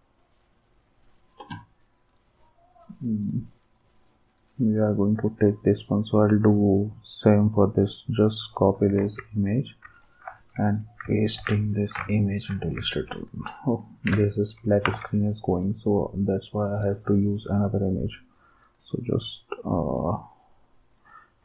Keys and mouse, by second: 2.1-3.1 drag, 3.2-4.2 drag, 4.4-5.4 right drag, 8.4 click, 9.0 alt+Tab, 10.7 click, 11.4 ctrl+v, 14.1 Delete, 14.8 alt+Tab, 16.8 click, 18.6 click, 20.9 click.